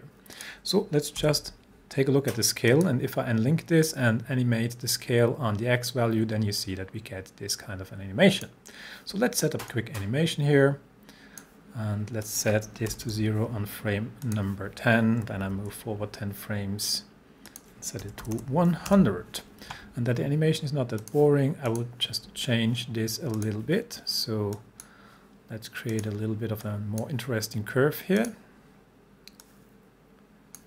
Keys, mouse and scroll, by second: 1.2 s, 2.7 click, 4.1-8.6 drag, 12.9 0, 14.3 click, 15.4 shift+Page_Down, 17.5 click, 17.8-18.9 typing, 21.0-27.3 drag.